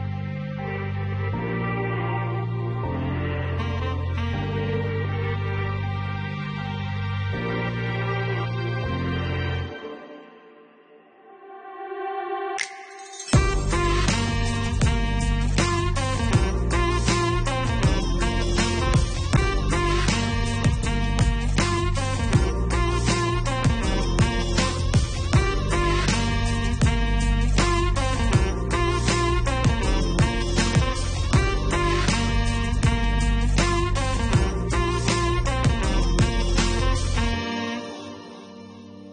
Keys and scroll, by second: 0.2 5, 1.7 Return.